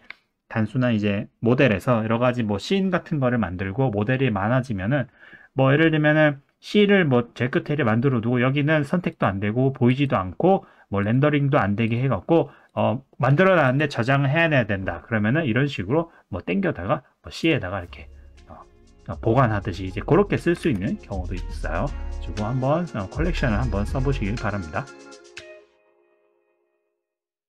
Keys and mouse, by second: 9.1 click, 9.9 click, 11.0 click, 11.8 click, 12.7 click, 13.7 click, 16.6 click, 20.6 ctrl+z.